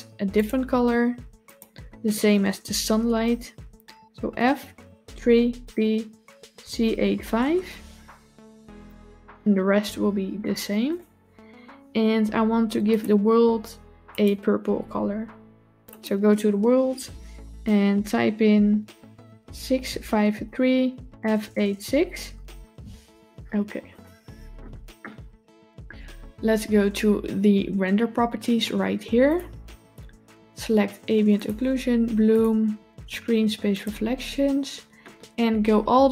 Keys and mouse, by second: 10.7 click, 12.7 click, 13.9 click, 23.8 click, 29.1 click, 31.2 click, 32.1 click, 33.6 click.